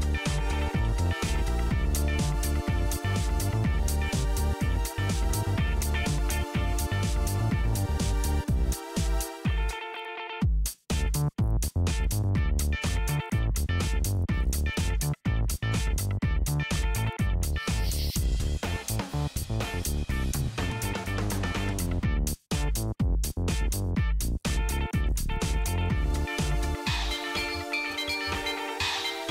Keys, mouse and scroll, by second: 0.1 ctrl+c, 0.3 click, 0.6 ctrl+v, 0.7 Return, 0.8 Return, 2.1 click, 3.0 ctrl+c, 3.4 shift+Left, 3.7 click, 3.8 shift+Left, 4.4 super+Left, 4.4 super+Left, 4.5-9.3 typing, 6.4 Return, 7.3 click, 7.7 Right, 7.9 Return, 9.9 super+Right, 9.9 super+Right, 10.4 click, 11.1 ctrl+c, 11.4 super+Left, 11.4 super+Left, 11.6 right click, 11.8 click, 12.0 Right, 12.4 Return, 13.2 super+Right, 13.2 super+Right, 14.0-15.4 typing, 17.0 super+Right, 17.0 super+Right, 18.1-19.8 typing, 20.2-22.3 scroll up 2, 22.3 scroll down 1, 22.5-23.5 scroll up 1, 24.0 scroll down 1, 24.4 Up, 24.5 Up, 24.5 Down, 24.7-26.1 typing, 26.9 Return.